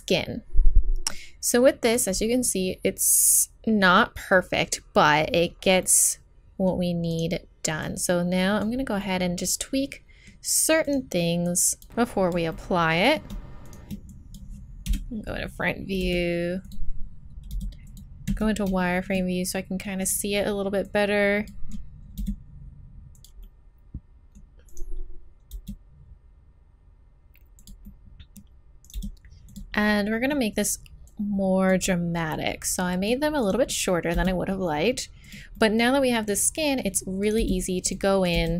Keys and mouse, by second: 1.1 click, 1.4 click, 2.8 middle click, 5.8-7.1 middle drag, 7.4-9.8 middle drag, 10.8 click, 12.3 click, 12.5 middle click, 13.8 right click, 14.1 middle click, 14.9 KP_1, 16.0 r, 17.5 g, 18.3 z, 22.2 g, 23.4-24.5 drag, 25.2 right click, 25.5 g, 28.9 g, 31.1 middle click, 33.4 right click, 34.1 g, 36.4 right click, 37.2 right click, 37.4 g, 38.3 g.